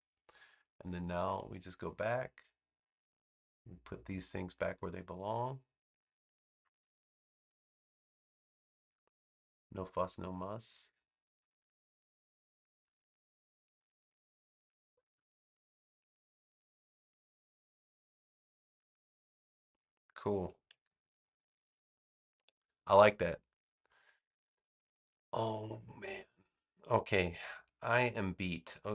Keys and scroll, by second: 1.1 a, 20.7 super+-.